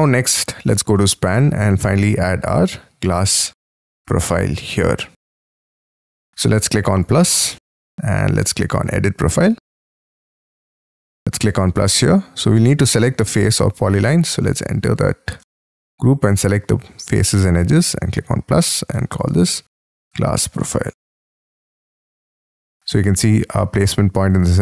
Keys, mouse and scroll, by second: 1.7-3.0 scroll down 28, 3.2 middle click, 3.8-4.3 scroll up 8, 4.3 middle click, 5.3-10.4 scroll up 4, 14.0-14.6 scroll up 8, 14.6 double click, 15.0 double click, 15.3 scroll up 3, 15.6 shift+middle click, 16.3 double click, 19.2-21.8 typing.